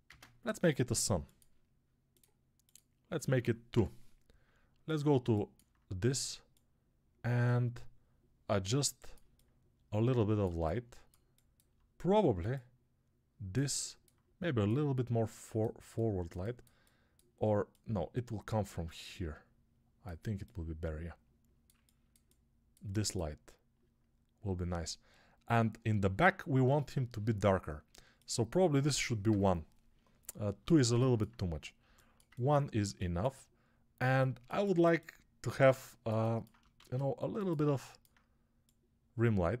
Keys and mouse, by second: 3.0-5.0 drag, 9.1-15.6 alt+drag, 11.0-15.6 alt+middle drag, 21.7-30.8 ctrl+alt+drag, 21.7-30.7 ctrl+alt+middle drag, 21.7-30.8 ctrl+alt+right drag, 36.6 shift+d, 37.5-39.6 alt+right drag.